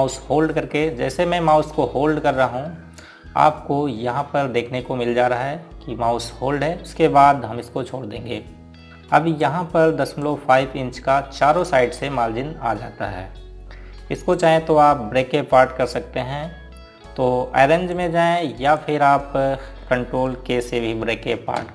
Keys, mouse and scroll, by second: 2.6 click, 12.4-15.1 scroll down 1, 15.5 click, 19.0 click.